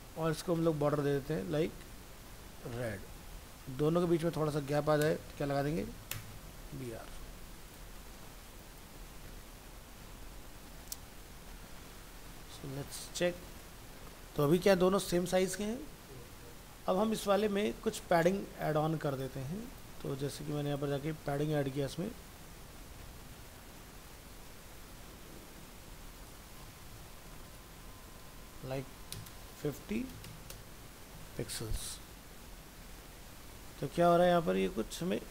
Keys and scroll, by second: 1.5 ctrl+shift+Left, 3.2 ctrl+s, 6.6 ctrl+s, 30.7 ctrl+s, 31.2 alt+Tab.